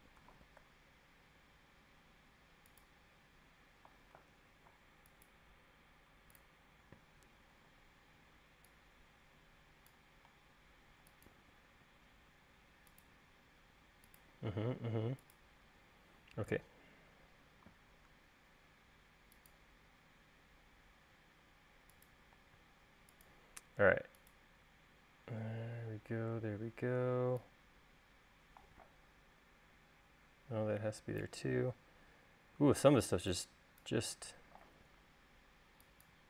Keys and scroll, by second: 6.5 Up, 7.8 e, 11.3 l, 22.5 l, 27.1 e, 30.9 Escape.